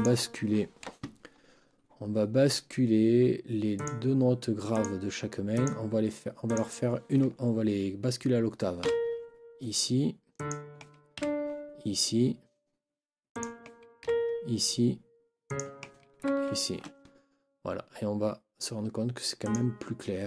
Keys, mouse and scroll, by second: 3.7 click, 4.7 click, 5.5 click, 6.5 click, 8.8 ctrl+Up, 10.3 click, 11.1 ctrl+Up, 13.3 click, 14.0 ctrl+Up, 15.5 scroll up 2, 16.2 ctrl+Up, 19.4 click.